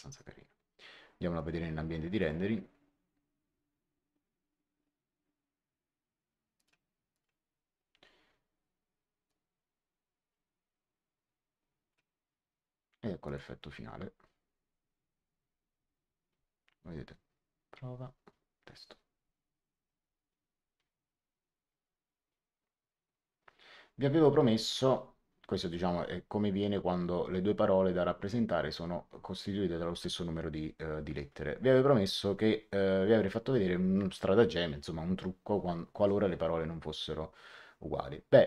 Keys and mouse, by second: 1.3 click, 6.5 click, 9.2 click, 13.2 click.